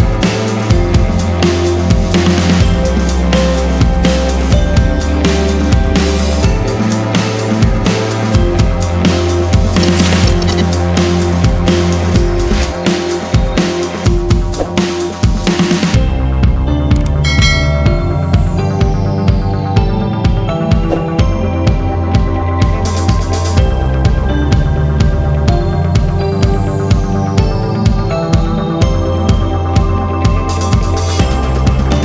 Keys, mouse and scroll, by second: 0.1 click, 0.5-0.9 scroll down 1, 0.9 scroll up 1, 1.8 scroll down 1, 2.4 scroll up 1, 2.7 scroll down 1, 3.2-3.8 scroll up 1, 3.9 click, 4.6 scroll down 1, 4.8 scroll up 1, 5.8 ctrl+o, 6.9 scroll down 1, 8.7 click, 9.6 click, 11.1 click, 12.1 F4, 12.4 click, 14.4 click, 15.2 click, 15.8 click, 15.9 double click, 17.0 click, 25.6 click, 30.2 click, 31.1 scroll up 1, 31.6-32.0 scroll down 1.